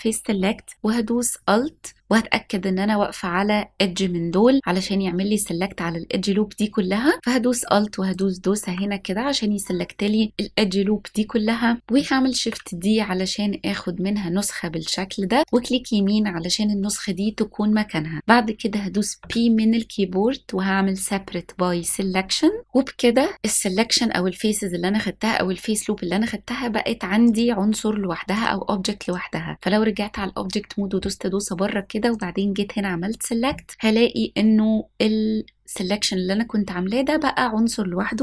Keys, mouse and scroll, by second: 3.0-3.8 scroll up 2, 4.4-7.4 scroll down 1, 8.2 alt+click, 12.4 shift+d, 15.5-17.2 right drag, 19.2 p, 27.3-29.2 drag, 32.2 click.